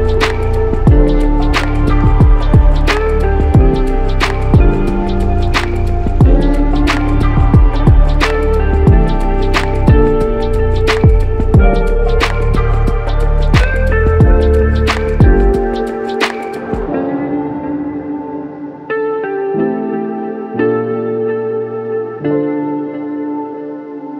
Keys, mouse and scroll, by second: 5.5 ctrl+z, 6.0 ctrl+z, 12.0 typing, 23.3 ctrl+z.